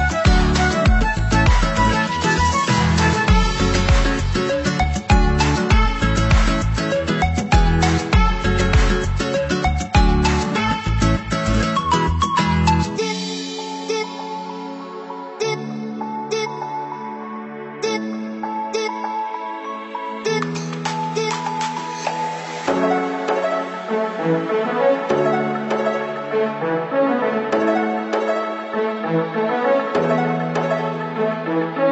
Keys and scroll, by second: 31.1 ctrl+=.